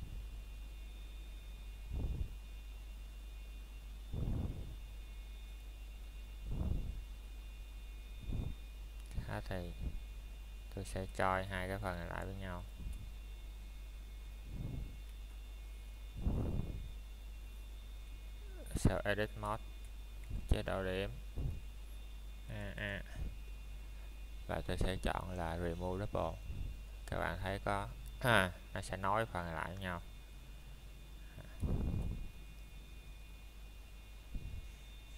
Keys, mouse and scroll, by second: 0.2 middle click, 0.6 scroll down 1, 2.2 click, 6.7 ctrl+j, 7.1 middle click, 7.5 scroll up 1, 8.6 middle click, 9.4 Tab, 10.3 click, 10.8 middle click, 11.7 ctrl+Tab, 12.9 click, 14.0 a, 16.7 typing, 17.9 click, 20.9 middle click, 24.4-24.8 scroll down 1, 24.8 middle click, 25.2-26.8 scroll up 1, 26.8 click, 27.2 middle click, 27.6-27.9 scroll down 1, 27.9 middle click, 28.3 scroll up 1, 28.6 middle click, 29.8 shift+middle click, 30.1 scroll up 1, 31.2 middle click, 31.8 Tab, 32.7 click, 33.1 scroll down 1, 33.4 middle click.